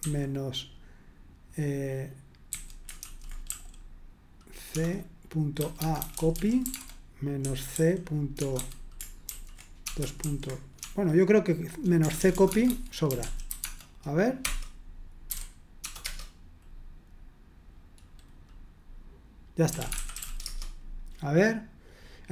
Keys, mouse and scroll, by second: 2.5-3.5 typing, 4.7-16.0 typing, 19.4-20.7 typing.